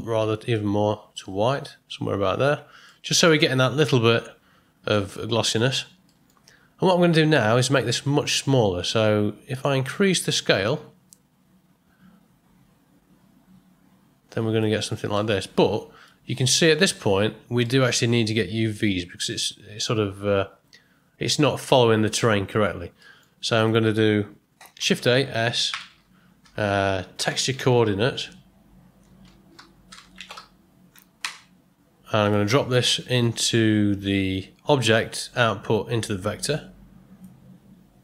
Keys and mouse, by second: 2.9-3.6 middle drag, 4.9 ctrl+middle drag, 6.1 middle click, 9.6-14.6 drag, 15.1-16.0 middle drag, 16.3-16.9 ctrl+middle drag, 17.6 middle click, 21.7 middle click, 22.5 ctrl+middle click, 23.0 middle click, 23.6 click, 24.8 shift+a, 26.5 BackSpace, 35.3-38.0 drag.